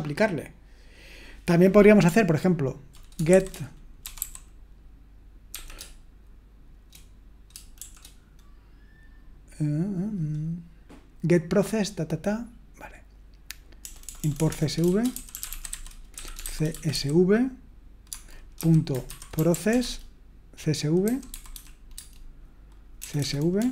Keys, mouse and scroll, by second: 3.3-4.7 typing, 7.5-8.3 typing, 13.8-23.7 typing.